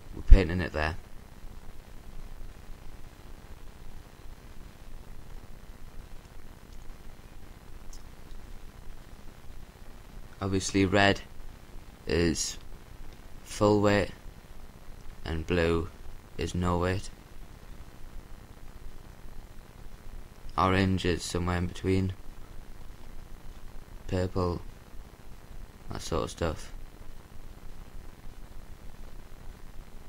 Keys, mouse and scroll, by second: 3.5-5.0 drag, 6.4-8.5 middle drag, 9.0-10.4 drag, 13.0-14.8 drag, 15.1-16.7 drag, 17.9-19.8 drag, 23.4-24.9 drag, 25.2-26.7 middle drag, 27.3-28.8 drag, 28.5-30.0 middle drag.